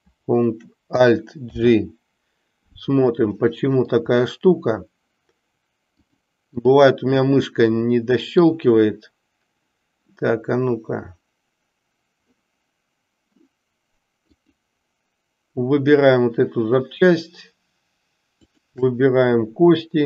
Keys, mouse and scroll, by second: 1.5 alt+g, 3.4-4.1 middle drag, 6.1 click, 7.3-8.5 middle drag.